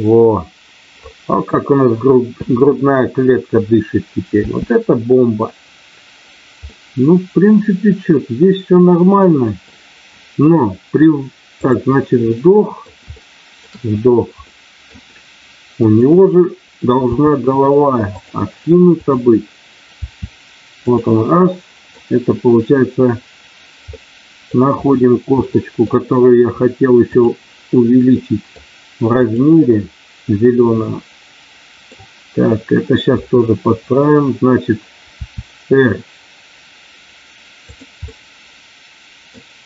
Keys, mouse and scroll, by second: 4.4 space, 6.6-9.5 middle drag, 11.5 click, 12.2 middle click, 13.0 shift+middle click, 14.5 middle click, 17.2 r, 18.0 click, 18.9 click, 20.9 click, 21.3 middle click, 23.9 middle click, 25.4 middle click, 28.1 middle click, 30.8-32.0 middle drag, 33.0 KP_3, 35.1 r, 38.0-39.3 middle drag.